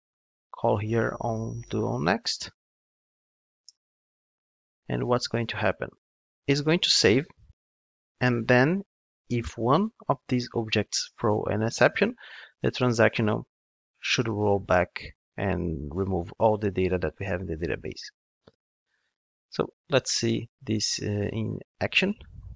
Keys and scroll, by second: 3.6 Return.